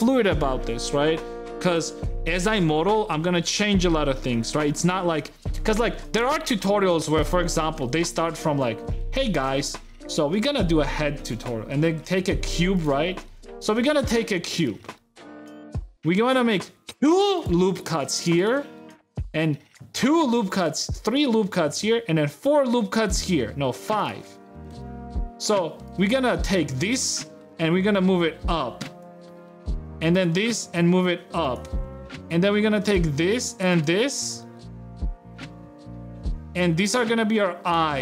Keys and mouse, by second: 7.2 middle click, 7.5 shift+middle click, 8.9 shift+a, 9.1 shift+c, 9.3 shift+a, 12.0 g, 12.9 shift+middle click, 14.2 Tab, 14.2 g, 14.5 click, 14.8 shift+middle click, 15.4 a, 15.9 ctrl+r, 19.0 ctrl+r, 21.2 a, 21.7 ctrl+r, 24.0 a, 24.3 click, 24.6 shift+click, 28.6 g, 29.3 click, 30.4 g, 31.6 ctrl+Tab, 32.6 click, 33.8 click, 34.2 shift+click, 34.8 ctrl+z, 35.1 ctrl+click, 35.4 middle click, 35.8 ctrl+z, 36.4 middle click, 36.5 click, 36.8 e.